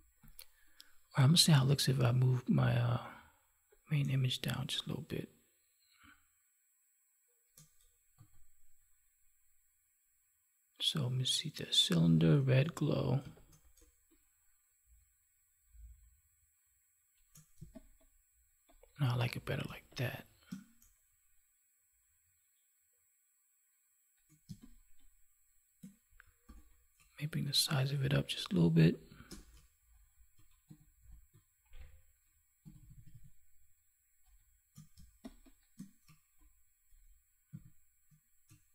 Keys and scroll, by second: 8.1 ctrl+z, 17.6 space, 24.4 space, 34.9 space.